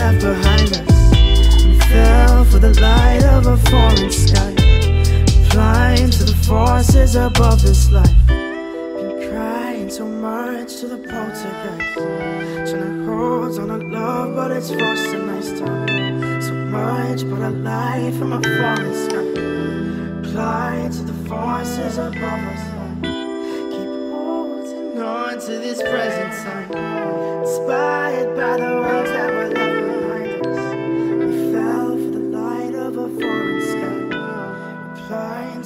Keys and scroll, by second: 5.7 ctrl+t.